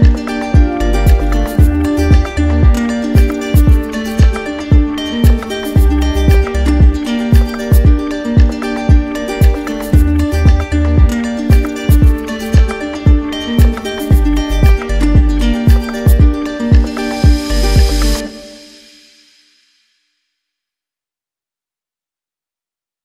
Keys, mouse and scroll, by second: 1.5-5.9 drag, 6.8 ctrl+z, 7.5 shift+click, 8.9 ctrl+click, 9.8 ctrl+click, 10.9 ctrl+click, 11.1 ctrl+click, 14.1 ctrl+click, 15.3 click, 17.3 ctrl+click, 18.4 click, 18.7 shift+click, 19.1 alt+click, 19.2 alt+click, 19.4 alt+click, 19.8 click, 20.1 click, 20.2 alt+click, 20.5 alt+click, 20.7 alt+click, 20.8 click, 20.9 shift+click, 21.2 click, 21.3 alt+click, 21.7 alt+click, 22.0 alt+click, 22.2 ctrl+click, 22.3 ctrl+click, 22.4 ctrl+click, 22.6 ctrl+click, 22.7 alt+click, 22.8 alt+click.